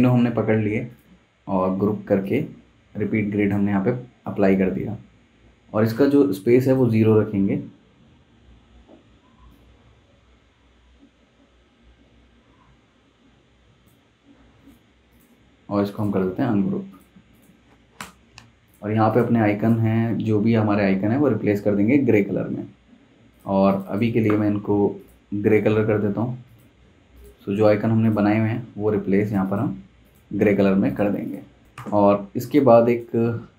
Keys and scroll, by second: 18.0 BackSpace, 31.4-32.2 typing.